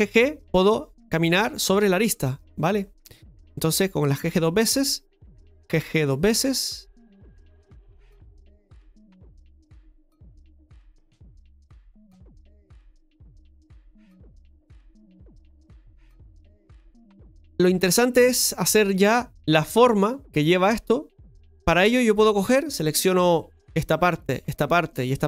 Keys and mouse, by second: 1.5 g, 3.4-4.7 right drag, 5.2-7.0 right drag, 7.5 right click, 8.8 g, 10.7 right click, 11.8 g, 12.5 right click, 15.7-21.3 shift+middle drag, 22.7 click, 23.8 right click, 24.7 shift+right click.